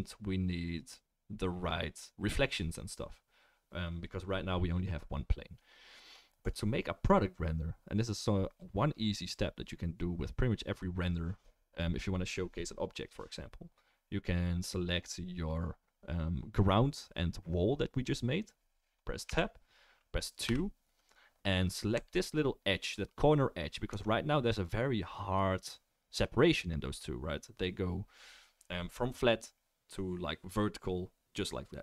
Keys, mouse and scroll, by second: 6.5-19.5 right drag, 19.3 Tab, 20.4 2, 22.0 click, 23.9 Tab.